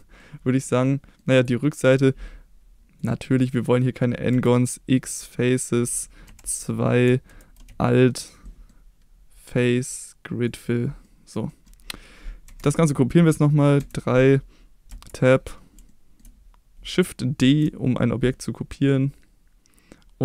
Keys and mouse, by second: 0.1 middle click, 0.8 middle click, 1.9 middle click, 2.9 click, 3.3 click, 4.3 x, 6.3 2, 7.8 alt+click, 8.4 middle click, 9.5 click, 11.0 middle click, 11.4 middle click, 12.4 KP_1, 13.7 KP_3, 14.9 Tab, 15.8 shift+middle click, 17.4 shift+d.